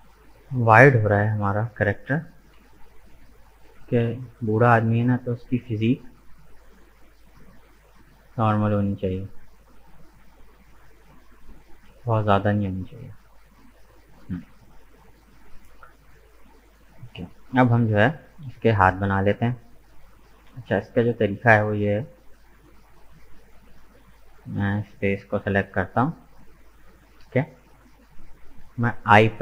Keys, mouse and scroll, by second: 0.4-1.7 drag, 1.7 right click, 2.5 KP_1, 3.7 g, 14.9 Tab, 15.0 right click, 17.1-18.3 middle drag, 18.3 right click, 18.6 Tab, 19.0-21.6 middle drag, 21.6-23.2 drag, 23.2 right click, 24.0 shift+right click, 24.8 shift+right click, 25.4 shift+right click, 26.3-29.1 middle drag.